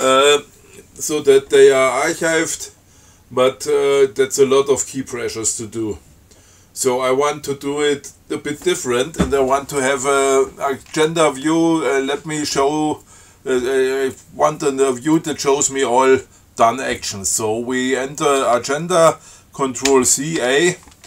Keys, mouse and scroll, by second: 11.3 click, 20.1 ctrl+c, 20.6 ctrl+a.